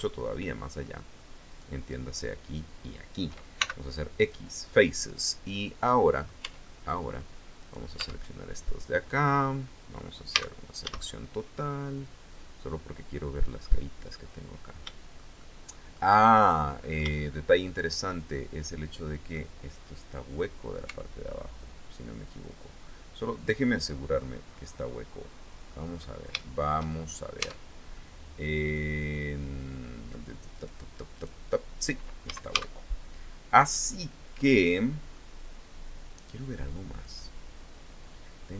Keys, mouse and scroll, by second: 1.0 shift+right click, 2.0 shift+right click, 3.1 shift+x, 3.7 click, 4.3-6.0 middle drag, 6.0 Tab, 6.2 click, 7.1 right click, 7.5 Tab, 8.5-8.9 scroll up 1, 9.9 a, 10.9-14.9 drag, 16.1-17.8 drag, 18.9-20.5 middle drag, 20.4 Tab, 22.3 scroll down 2, 23.3 click, 24.3-25.4 middle drag, 25.9 shift+middle click, 26.8 scroll up 2, 26.9 Tab, 27.5 middle click, 27.5 scroll up 1, 30.1 right click, 30.7 right click, 31.8 a, 32.5-32.9 scroll down 1, 33.1-34.9 middle drag, 36.5 click.